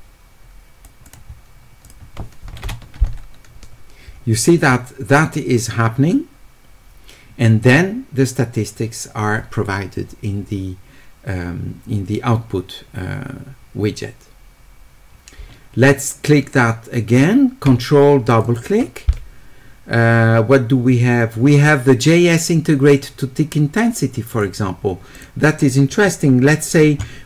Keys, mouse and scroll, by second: 0.0 click, 1.0 click, 18.3 ctrl+click, 18.5 ctrl+click, 20.2-22.0 middle drag, 24.3 click, 25.2 click, 25.9 middle click.